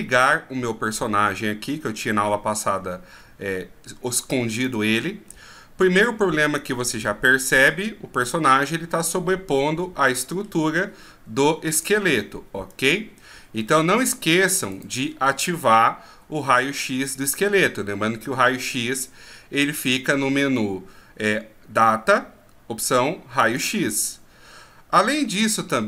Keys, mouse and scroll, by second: 0.1 shift+scroll up 4, 4.6 click, 5.3-5.8 scroll down 3, 8.1 scroll down 2, 12.7 click, 13.6 scroll up 1, 14.7 right click, 14.7-15.9 scroll up 4, 23.4 click.